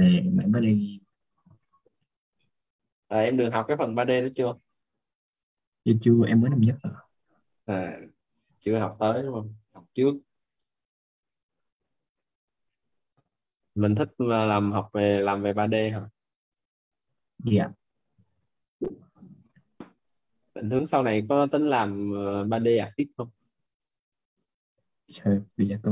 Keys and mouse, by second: 23.6 click.